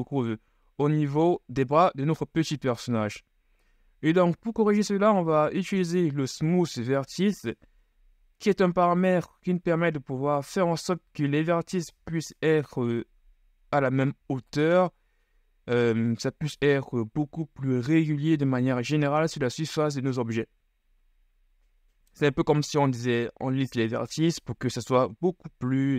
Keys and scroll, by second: 1.7 KP_1.